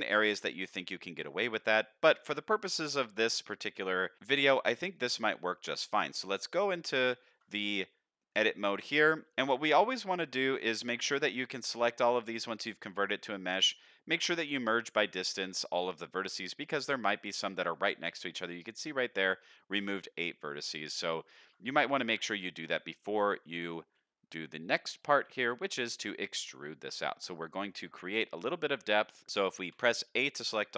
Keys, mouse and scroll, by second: 0.6 ctrl+z, 1.1 ctrl+z, 1.7-2.0 scroll down 1, 2.0 Tab, 2.5 shift+middle drag, 3.0-3.5 middle drag, 3.7-4.8 scroll down 3, 4.8 scroll down 1, 4.9-5.6 middle drag, 6.6 Tab, 7.1 shift+middle click, 7.5 a, 8.4 shift+middle click, 9.4 1, 9.7-10.4 scroll up 4, 10.4 middle click, 12.1 m, 20.7-21.1 scroll down 2, 21.2 shift+middle click, 21.5-23.5 scroll down 1, 23.5 3, 24.0 middle click, 25.5 middle click, 29.7 a.